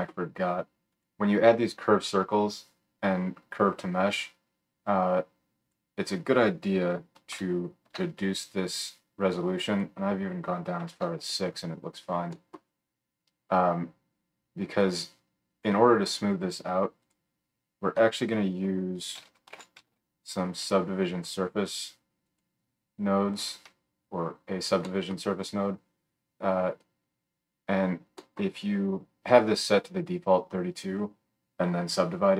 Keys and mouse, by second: 1.0-5.6 drag, 5.6-17.2 middle drag, 12.3-28.5 drag, 12.3-17.2 right drag, 18.0 F3, 26.7-28.5 middle drag, 26.7-28.5 right drag.